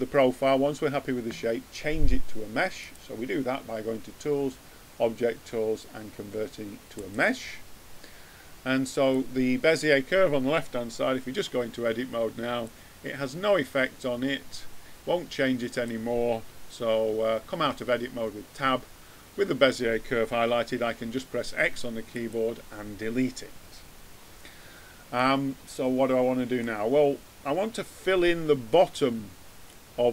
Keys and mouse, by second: 2.7-4.7 drag, 8.9-10.6 drag, 11.2 Tab, 12.5-14.3 drag, 17.6 Tab, 20.9 x, 25.1 middle click, 26.1 middle click, 26.5 middle click, 27.1-30.1 middle drag.